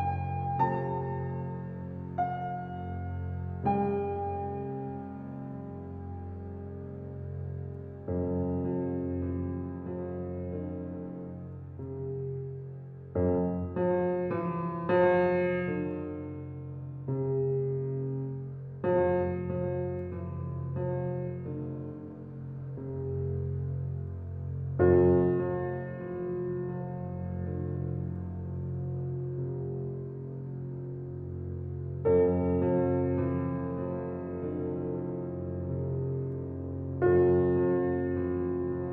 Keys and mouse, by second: 1.7 click, 2.9 a, 3.9-6.9 ctrl+alt+drag, 5.2 typing, 7.2 typing, 7.7 alt+shift+click, 8.6 middle click, 8.7 ctrl+alt+click, 12.5 click, 13.3 click, 15.0 a, 20.4-21.4 drag, 21.6-23.0 ctrl+alt+drag, 23.8 click, 25.1 ctrl+alt+click, 26.1-28.7 ctrl+alt+drag, 30.4-32.2 ctrl+alt+drag, 36.7-38.9 drag.